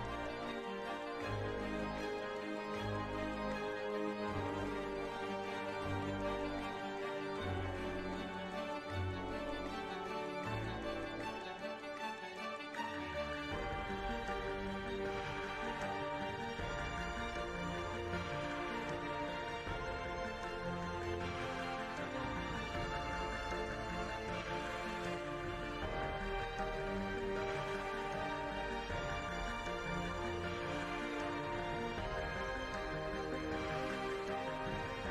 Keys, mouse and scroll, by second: 0.1 n, 0.4 shift+a, 1.0 s, 2.7 shift+a, 3.7 g, 4.2 g, 5.2 right click, 6.9 KP_Decimal, 7.5 shift+z, 8.8 shift+z, 12.5 middle click, 14.4 right drag, 16.1 click, 16.6 e, 18.7-20.9 drag, 20.2 d, 21.3-25.2 drag, 26.7-29.5 drag, 29.5 right click, 30.7 right click.